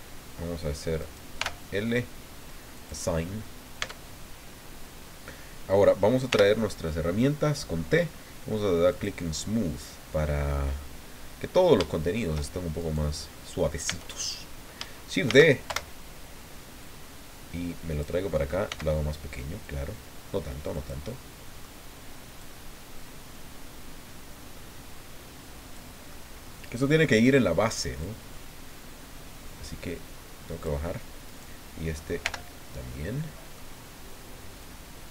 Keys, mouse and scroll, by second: 1.0 right click, 1.4 l, 2.7 click, 3.8 Tab, 6.3 t, 8.9 click, 11.9 shift+middle click, 12.8 shift+right click, 13.8 Tab, 15.3 shift+d, 15.7 shift+Return, 16.8-18.2 drag, 18.7 s, 20.7 click, 21.1 middle click, 22.4-25.9 drag, 26.1 click, 28.0-30.8 drag, 31.2 right click, 32.2 l, 32.9 middle click, 34.6-35.1 drag.